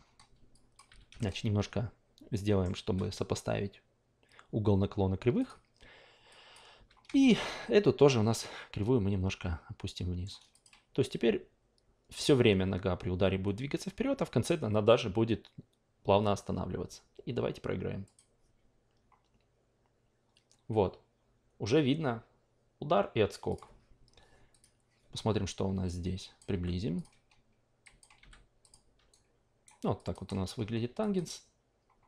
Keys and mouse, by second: 0.5 click, 1.2-5.4 shift+middle drag, 5.4 click, 6.3 click, 6.7 w, 7.2-10.2 shift+middle drag, 10.5 click, 18.0 click, 23.5 click, 24.5 click, 25.8 click, 26.5 f, 27.0 click, 27.8 click, 28.2 f, 28.6 click, 29.1 alt+right click, 30.0 click, 31.0 drag.